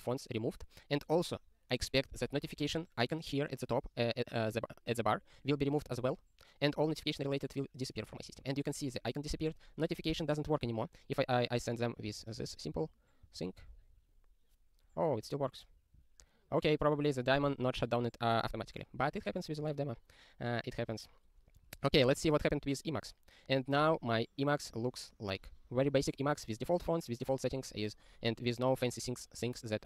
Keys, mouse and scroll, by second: 6.7 super+r, 12.0 click, 12.2 ctrl+e, 12.5 alt+w, 13.0 super+t, 13.4 ctrl+y, 13.7 Return.